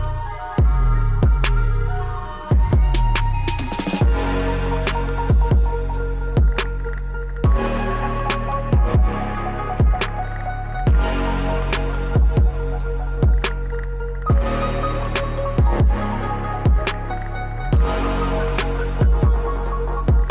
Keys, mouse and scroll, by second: 10.5 scroll down 1, 10.8-18.7 drag.